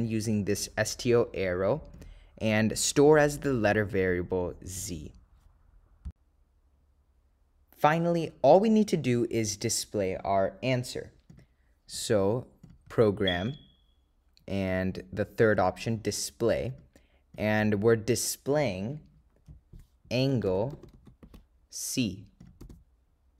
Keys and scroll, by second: 0.0 ÷, 1.3 /, 1.9 ÷, 2.1 /, 4.9 2, 9.9 ÷, 10.5 /, 11.0 ÷, 11.4 Return, 11.8 /, 13.6 Right, 15.3 ÷, 15.7 3, 18.9 /, 21.1 ), 22.5 0.